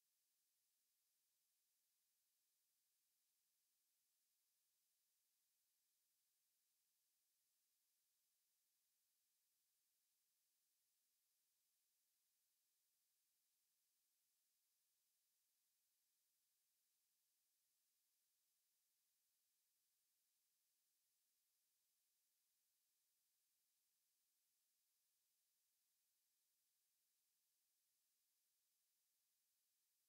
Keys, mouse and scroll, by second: 13.4 n, 14.5 n, 16.1 t, 17.2 t, 28.5 middle click.